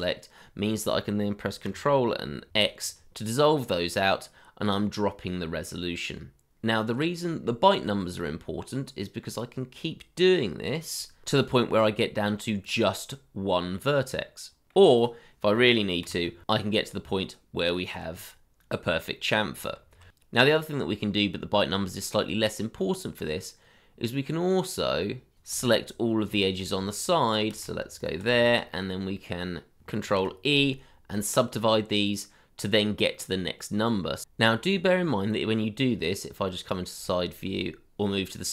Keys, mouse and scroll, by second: 0.4 middle click, 2.5 ctrl+x, 3.2-4.2 scroll up 1, 4.2 middle click, 10.8 ctrl+x, 11.4 middle click, 16.5 ctrl+x, 17.6 middle click, 18.8 scroll down 1, 19.9 ctrl+z, 22.5 middle click, 22.7 shift+middle click, 22.9 middle click, 23.1 shift+middle click, 23.3 middle click, 23.4 shift+middle click, 23.6 scroll down 1, 23.8 middle click, 24.9 shift+middle click, 25.1 middle click, 26.3 ctrl+click, 27.2 shift+click, 28.0 ctrl+click, 28.7 middle click, 29.6 scroll up 1, 30.0 ctrl+e, 32.1-32.7 scroll up 1, 33.2 middle click, 36.5 middle click, 37.1 shift+middle click, 37.3 scroll up 1, 38.0 middle click.